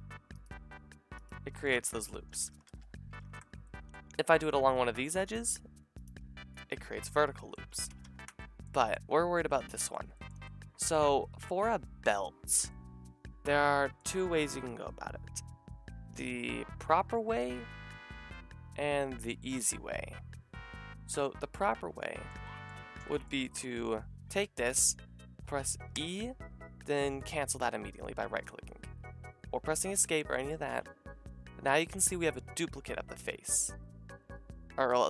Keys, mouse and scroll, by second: 0.3 alt+shift+click, 1.2 alt+shift+click, 1.7 alt+shift+click, 2.5 ctrl+z, 2.7 ctrl+z, 2.8 ctrl+z, 3.1 ctrl+z, 3.5 click, 4.0 click, 5.2 alt+shift+click, 5.9 alt+shift+click, 6.5 alt+shift+click, 6.8 click, 7.7 ctrl+z, 7.9 ctrl+z, 8.0 ctrl+z, 10.3-35.0 drag, 24.4 g, 25.9 e, 31.8 g.